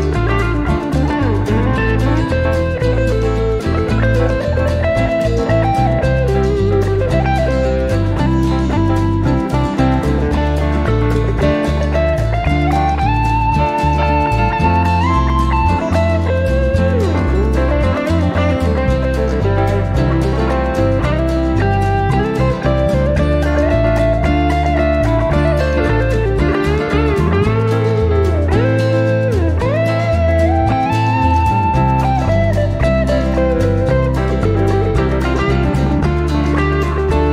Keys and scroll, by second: 3.0 shift+±, 4.3-5.7 typing, 22.8 typing, 33.4-34.1 typing.